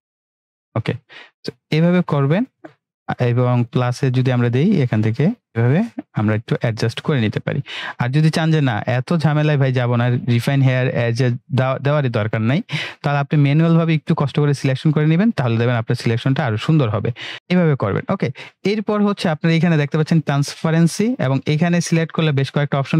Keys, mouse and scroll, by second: 16.1-16.8 click, 17.3 ctrl+z, 21.6 click.